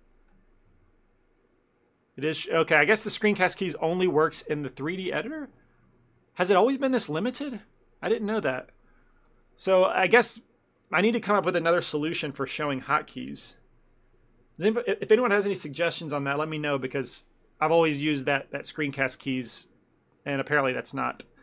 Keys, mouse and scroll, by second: 0.7 n, 6.9 n.